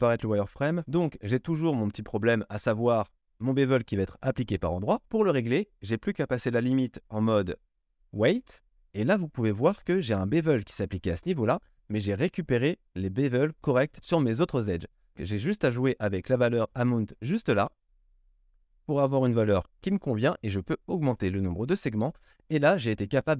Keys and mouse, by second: 7.4-23.3 drag.